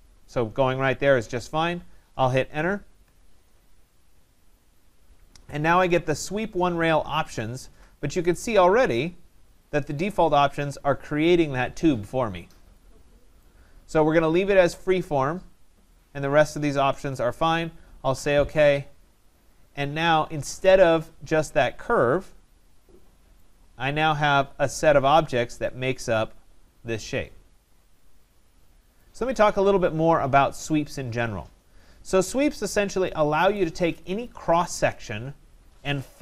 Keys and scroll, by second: 3.0 Return.